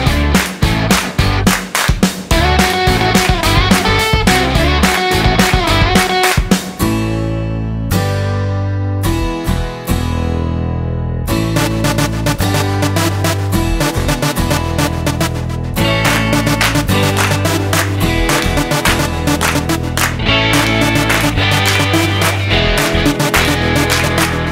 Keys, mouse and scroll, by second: 3.6 click, 8.2 click, 11.4 click, 18.5 scroll up 1, 18.6 middle click, 20.0 middle click, 20.6 middle click, 20.9-22.3 scroll down 14, 22.3 middle click, 23.1 click.